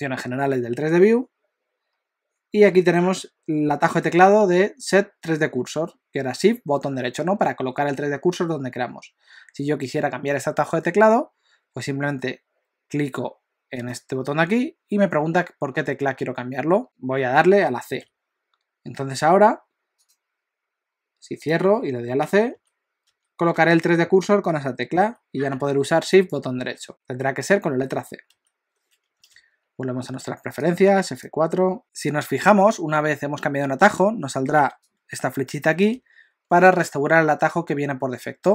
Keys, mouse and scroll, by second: 22.5-25.0 typing, 26.1 shift+right click, 26.9 c, 27.9 c, 28.3 c, 29.2 F4.